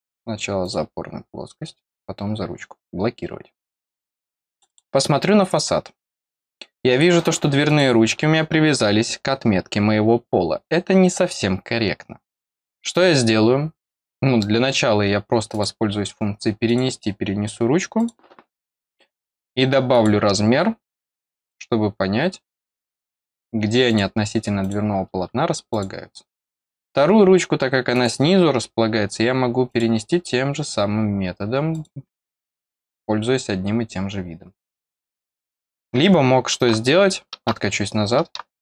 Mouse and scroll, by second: 0.6 click, 1.8 click, 4.5 click, 4.6 click, 5.5 scroll down 1, 6.2 scroll up 1, 7.6 click, 15.4 click, 16.6 click, 17.9 click, 19.9 click, 21.3 click, 23.1-23.8 scroll up 1, 23.8 click, 24.5 click, 25.6 click, 27.9 click, 29.6 click, 31.7 click, 35.2 middle click, 35.2 scroll down 1.